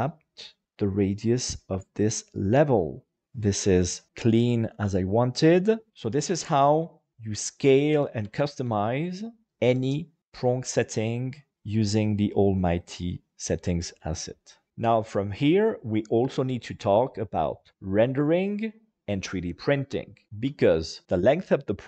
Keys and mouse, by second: 3.2 middle click.